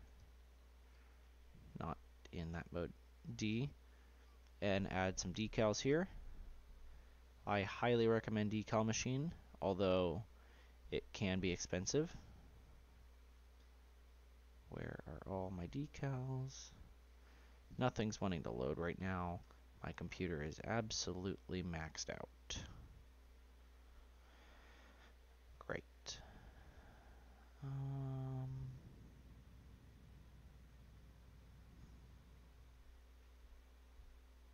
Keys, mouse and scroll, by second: 2.1-3.2 drag, 3.2 d, 18.2 Delete, 19.4 d, 24.7 Delete, 25.8 d.